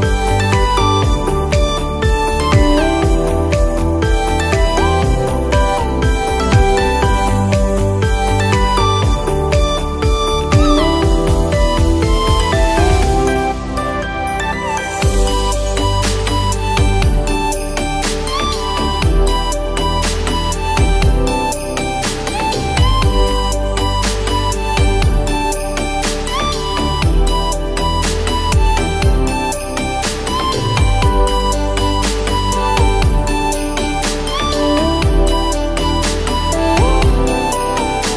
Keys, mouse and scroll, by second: 0.5 Return, 1.0 alt+scroll up 1, 3.0 alt+scroll down 1, 4.3-6.7 drag, 6.7 alt+scroll up 1, 8.0 scroll up 1, 8.8 click, 13.1 right click, 14.9 click, 15.8-16.2 ], 17.2 click, 24.9-25.8 alt+scroll down 2, 25.9-27.7 alt+scroll up 4, 27.9 ctrl+z, 30.6 alt+scroll down 1, 33.4 click, 33.4 click, 34.3 click, 36.5 scroll up 1, 37.0 scroll down 1, 37.7 scroll up 1.